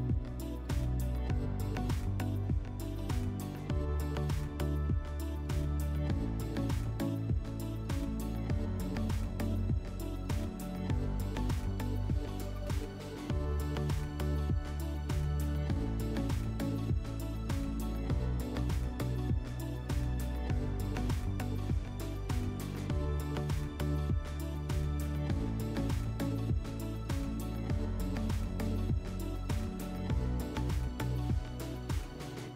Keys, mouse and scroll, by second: 4.0 click, 6.9 click, 9.1 click, 10.4 click, 10.7-11.9 drag, 14.9 click, 16.3 click, 17.5 1, 19.0 scroll, 19.8 click, 20.5 middle click, 21.2 1, 21.4 scroll.